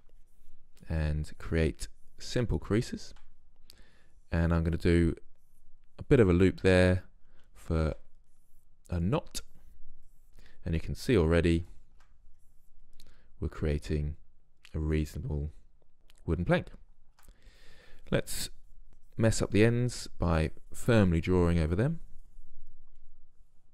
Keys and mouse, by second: 0.2-10.5 drag, 10.6 click, 11.5 click, 11.8-15.1 drag, 16.1-16.4 middle drag, 17.7-23.1 drag.